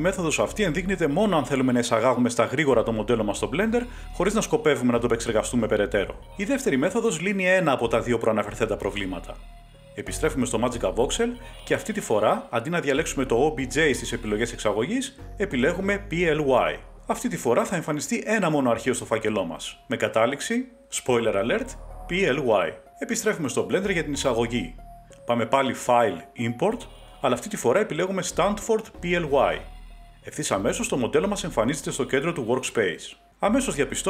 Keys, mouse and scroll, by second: 12.2 click, 15.0 click, 19.1 click, 22.1 click, 22.6 Page_Up, 25.3 click, 29.0 click, 31.1 click, 32.5 click.